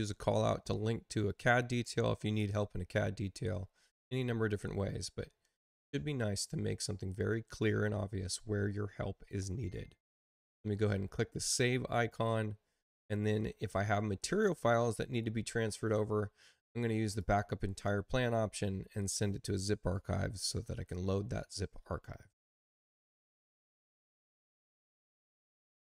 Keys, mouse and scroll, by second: 11.3 click, 14.1 click, 17.1 click, 22.4 click.